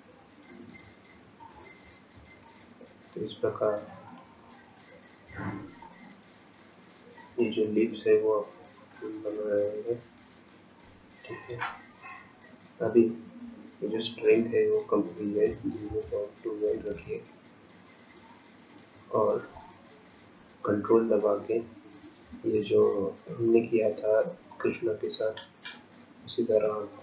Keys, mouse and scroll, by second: 4.6-5.3 scroll up 1, 5.8 shift+click, 14.0 click, 24.5 ctrl+click.